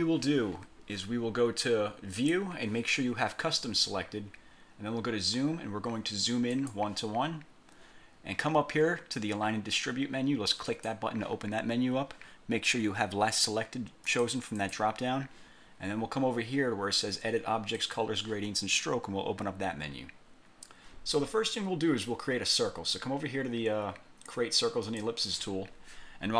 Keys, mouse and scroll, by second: 2.3 click, 6.7 click, 10.8 click, 14.2 click, 14.7 click, 17.9 click, 24.9 click.